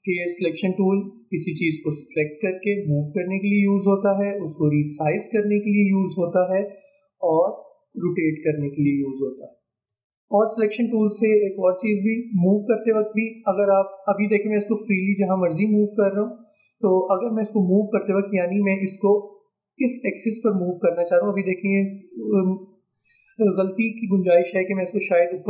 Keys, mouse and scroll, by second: 0.5-6.1 drag, 6.1 ctrl+z, 7.5-9.9 drag, 9.9 ctrl+z, 10.8-14.0 drag, 14.0-16.6 drag, 16.6 ctrl+z, 17.5-25.4 drag.